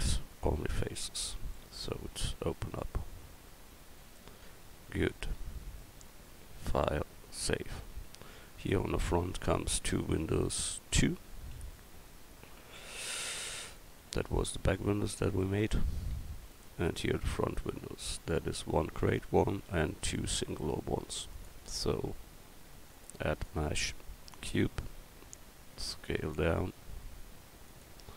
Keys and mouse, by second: 0.9 Tab, 8.5-11.8 middle drag, 11.8 KP_1, 25.0 s.